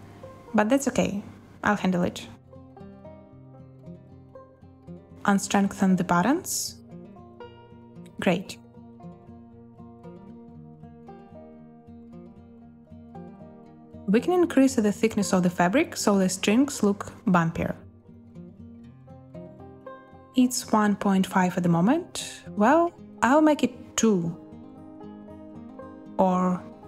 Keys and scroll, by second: 2.2 space, 5.3 ctrl+h, 5.6 space, 10.4 space, 22.8 2, 23.2 Return.